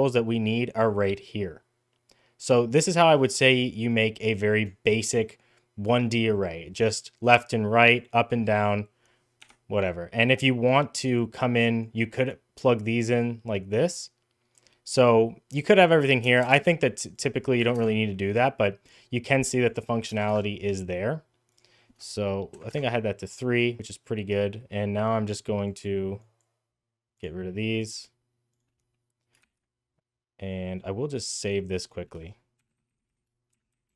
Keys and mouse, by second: 2.6 shift+middle click, 3.7 click, 7.8-9.3 drag, 10.7 click, 11.8-13.0 drag, 13.5 click, 15.6-16.6 drag, 17.0-18.0 drag, 18.7 click, 19.5-20.5 drag, 21.3-22.9 drag, 25.7-26.2 drag, 27.0 click, 27.7-28.4 drag, 29.3 ctrl+s.